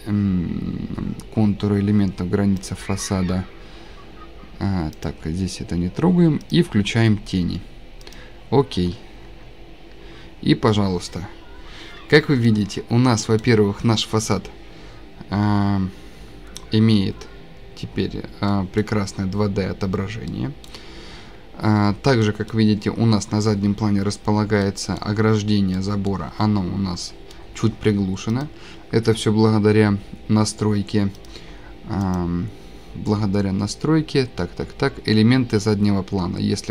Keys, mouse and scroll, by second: 0.5 scroll, 2.7 click, 5.1 click, 5.4 click, 5.4 scroll, 6.5 click, 6.5 scroll, 6.8 click, 6.8 click, 8.1 click, 8.7 scroll down 3, 10.1-10.7 scroll, 12.4 scroll, 13.2 scroll, 16.1-16.7 scroll, 18.1 scroll, 18.5 click, 18.8 click, 20.6 click, 21.9 click, 21.9 click, 22.2-23.1 scroll, 24.1 scroll, 24.9 scroll, 25.5-26.1 scroll, 26.6-27.1 scroll, 31.3 click, 32.1 click, 32.2 scroll up 1, 34.1-34.7 scroll down 2.